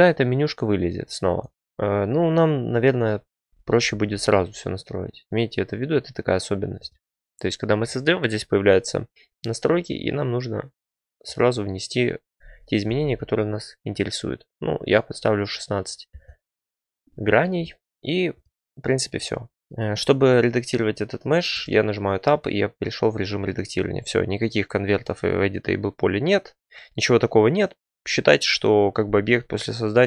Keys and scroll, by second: 1.5 Delete, 3.8 a, 12.8 typing, 16.0 Return, 21.5 Tab.